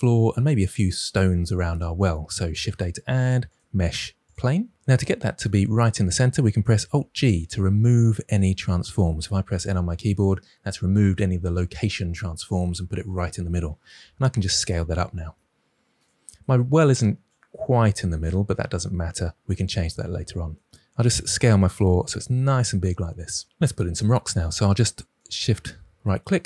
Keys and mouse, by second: 2.5 shift+a, 6.9 alt+g, 9.4 n, 13.9 s, 14.6 click, 17.7 KP_7, 19.4-20.6 middle drag, 21.1 s, 25.1 shift+right click.